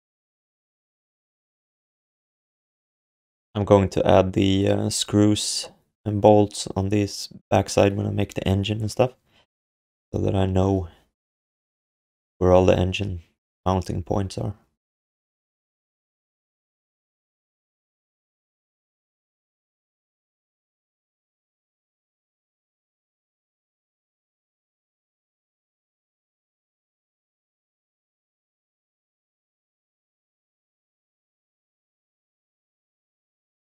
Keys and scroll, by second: 25.6 ctrl+s.